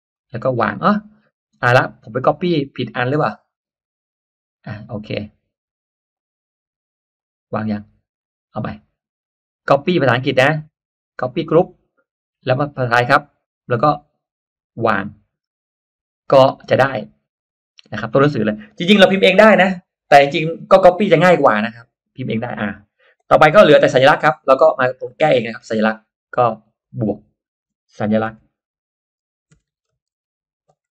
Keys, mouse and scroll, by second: 0.0 click, 3.2 click, 5.1 click, 6.0 click, 7.1 click, 8.6 click, 9.5 right click, 11.4 click, 12.4 click, 13.0 right click, 15.4 click, 16.6 click, 22.3 click, 24.9 click, 26.8 click, 28.3-30.9 typing.